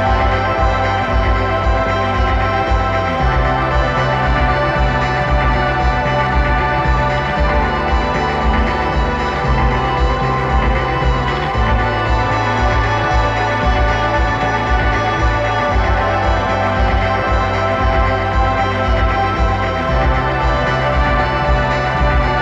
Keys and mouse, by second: 2.3-4.0 drag, 4.7-6.4 drag, 6.5-8.4 drag, 11.1 middle click, 11.5 middle click, 13.0 middle click, 13.3-14.8 right drag, 17.4 middle click.